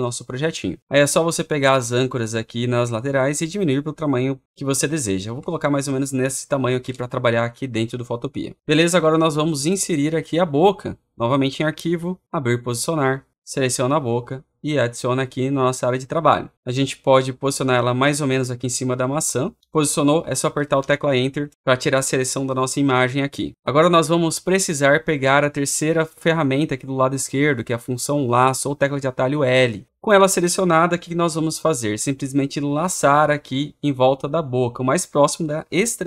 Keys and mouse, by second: 5.0 alt+click, 6.2 click, 6.7 Return, 14.4 click, 16.0-17.1 drag, 20.6 Return.